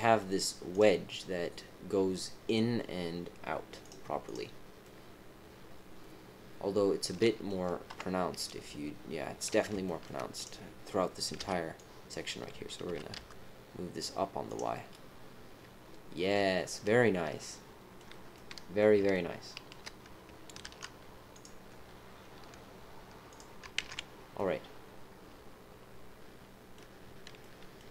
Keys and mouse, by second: 4.8-7.4 middle drag, 6.9 click, 6.9 right click, 7.9 KP_7, 9.8 shift+middle click, 10.3 click, 11.3 b, 12.8 g, 14.7-17.9 middle drag, 18.3 middle click, 19.1 shift+middle click, 20.6 ctrl+r, 23.8 ctrl+z, 24.3 click, 25.3-26.7 middle drag, 27.4 middle click.